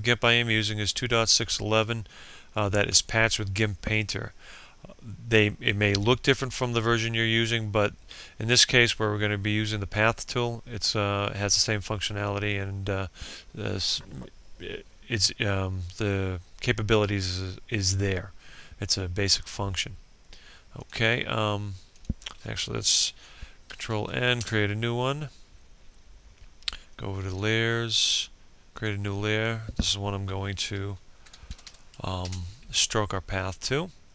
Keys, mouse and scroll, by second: 23.4 ctrl+n, 24.0 Return, 26.9 click, 30.6-31.7 typing, 31.8 Return.